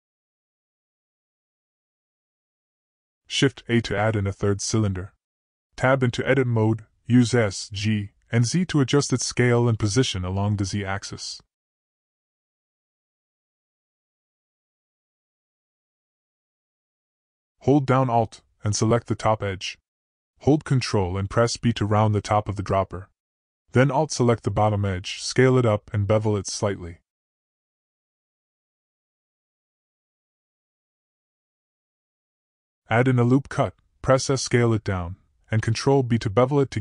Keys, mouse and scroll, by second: 2.5-3.0 drag, 4.4 shift+a, 6.5 Tab, 7.2 s, 8.6 g, 10.7 s, 14.3 s, 19.2 ctrl+b, 23.8 alt+click, 24.9 s, 28.6 ctrl+b, 31.3 g, 33.8 click, 34.3 click, 35.4 click, 36.0 s.